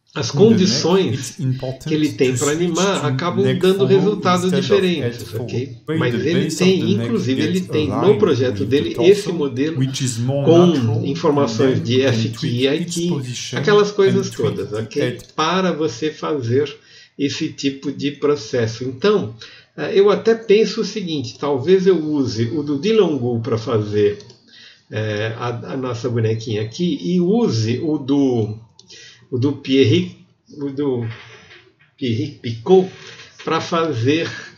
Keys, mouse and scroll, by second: 0.2-1.0 scroll down 10, 1.1 click, 1.9-2.5 scroll down 4.